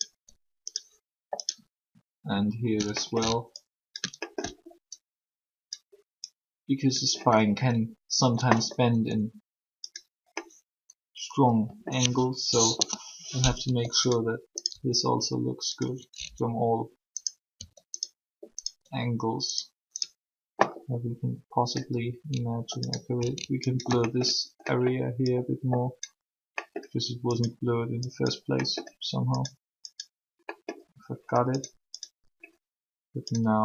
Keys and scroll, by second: 8.9 r, 12.7 3, 17.5 r.